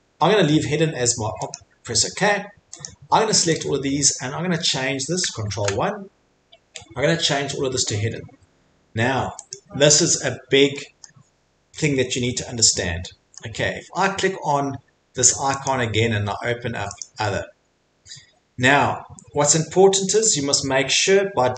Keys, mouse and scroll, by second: 3.6 click, 5.5 ctrl+1, 9.5 click, 9.8 Escape, 11.0 middle click, 13.4 middle click, 15.8 click, 17.0 click, 20.2 click, 21.0 click.